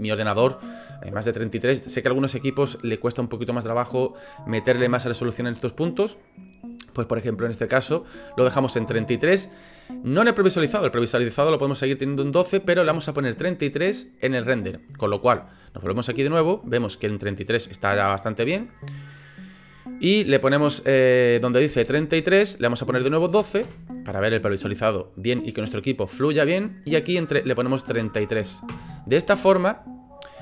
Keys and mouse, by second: 15.3 shift+middle click, 15.8 middle click, 16.2 shift+middle click, 20.2-26.5 drag, 27.0-29.2 drag, 28.0 KP_3.